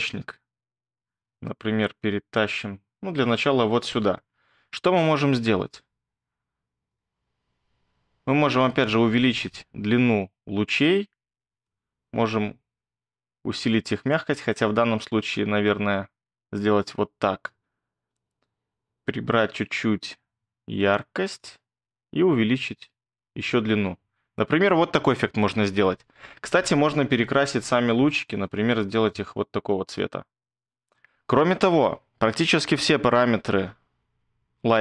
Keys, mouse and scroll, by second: 1.0 ctrl+click, 4.6 scroll.